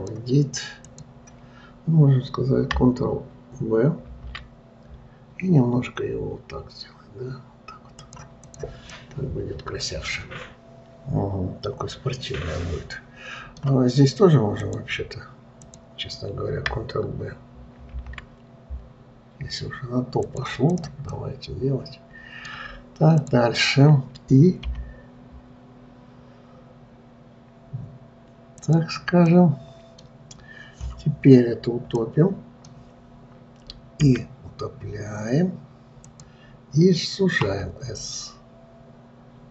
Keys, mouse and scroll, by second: 8.8 click, 9.4-12.5 middle drag, 15.0 click, 16.0 click, 18.3 ctrl+b, 21.2 click, 21.6-23.7 middle drag, 23.7 click, 25.1 i, 29.7-31.3 middle drag, 31.3-32.0 scroll up 1, 32.0-32.4 scroll down 2, 32.4-34.5 middle drag, 34.5 e.